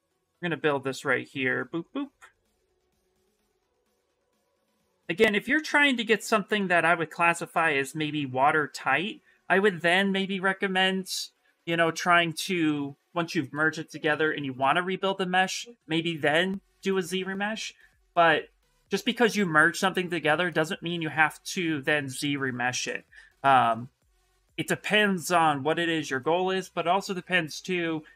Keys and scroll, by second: 0.0-0.2 typing.